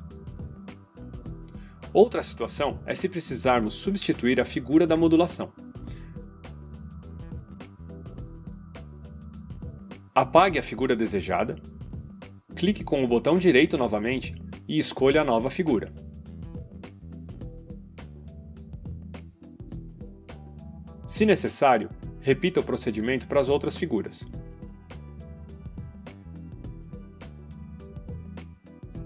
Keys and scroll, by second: 12.2 BackSpace, 24.1 BackSpace.